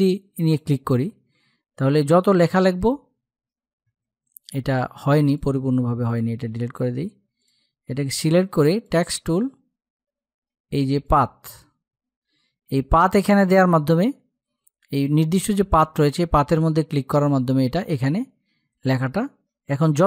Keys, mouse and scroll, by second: 1.3-3.0 typing, 4.1 click, 6.3 Delete, 6.7 click, 17.3-20.0 typing.